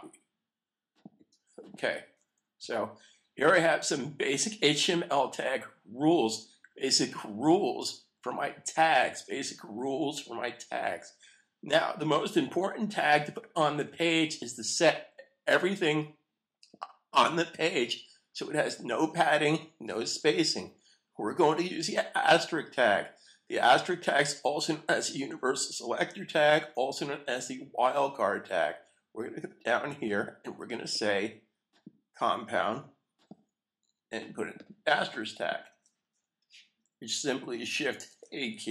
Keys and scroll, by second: 2.6 super+s, 38.0 shift+8.